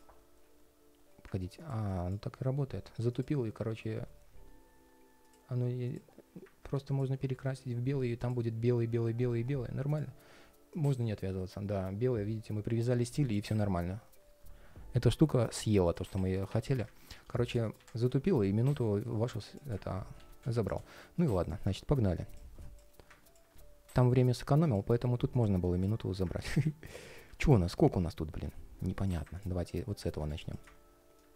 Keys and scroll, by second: 20.6 ctrl+shift+4, 22.6 ctrl+shift+4, 24.7 ctrl+shift+4.